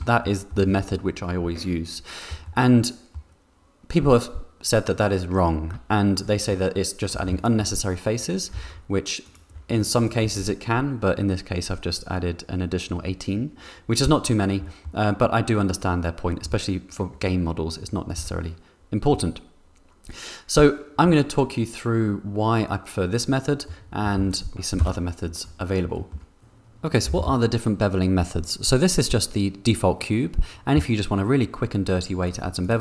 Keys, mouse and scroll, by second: 0.2 click, 0.2 middle click, 2.6 middle click, 6.5 Tab, 7.2 2, 8.5 3, 9.2 alt+click, 14.6 middle click, 16.4 Tab, 18.1 Tab, 19.5 Tab, 23.6 click, 24.1 x, 24.8 KP_0, 25.9 shift+middle click, 32.2 click, 32.6 click.